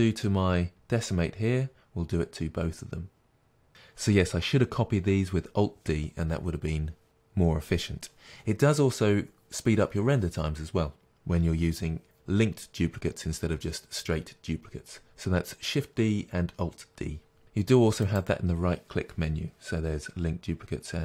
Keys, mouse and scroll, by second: 0.3-3.7 drag, 3.7-21.0 middle drag, 3.7-5.0 scroll down 2, 5.0-8.2 scroll down 1, 8.2-13.4 scroll down 1, 13.4-17.4 scroll down 1, 17.4-18.5 scroll down 1.